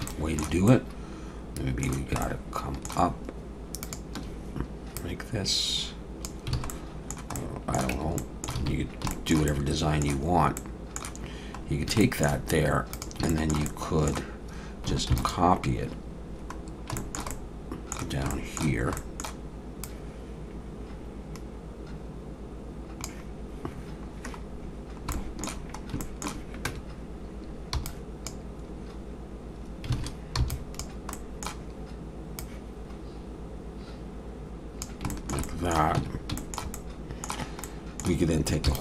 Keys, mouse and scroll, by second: 0.1 shift+middle click, 0.7 middle click, 2.2 shift+middle click, 3.8 shift+click, 5.0 click, 6.6 alt+a, 6.7 middle click, 7.4 middle click, 7.9 Tab, 8.2 middle click, 8.6 alt+a, 8.8 scroll down 2, 9.1 shift+middle click, 9.5 middle click, 10.8 middle click, 11.6 scroll down 2, 12.0 shift+middle click, 12.9 click, 13.3 shift+middle click, 13.6 middle click, 15.2 shift+d, 16.6 scroll down 1, 16.9 shift+middle click, 17.3 middle click, 18.3 shift+middle click, 18.9 middle click, 19.8 click, 24.7 scroll down 1, 25.1 shift+middle click, 26.1 shift+middle click, 26.7 Tab, 27.8 click, 30.0 alt+a, 30.4 b, 31.1 middle click, 32.4 click, 35.1 shift+middle click, 35.5 middle click, 36.0 Tab, 36.4 shift+middle click, 36.8 middle click, 37.6 middle click, 38.7 shift+d.